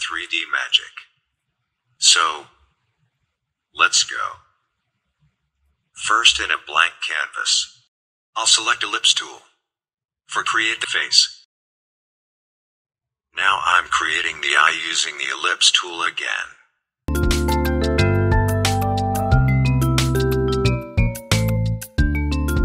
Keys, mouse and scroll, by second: 4.9 click, 7.8 click, 9.4 click, 10.4-14.5 alt+shift+drag, 14.8-20.5 alt+shift+drag, 20.5-22.6 alt+shift+drag.